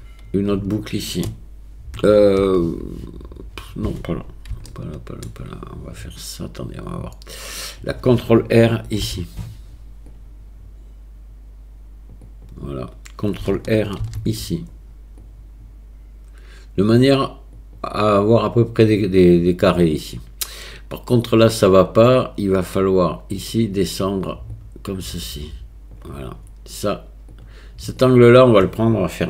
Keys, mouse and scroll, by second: 4.7 shift+click, 9.0 ctrl+r, 14.0 ctrl+r, 23.4 click, 24.6-26.0 drag, 27.4 click.